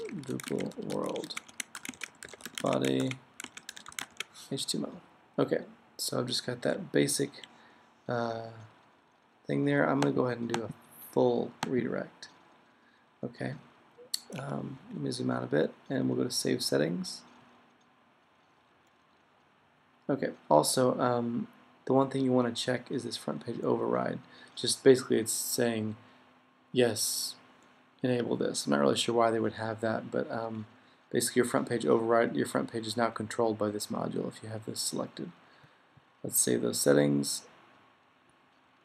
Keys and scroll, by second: 0.0-4.6 typing, 6.7 Up, 22.5 Up, 38.1 Up.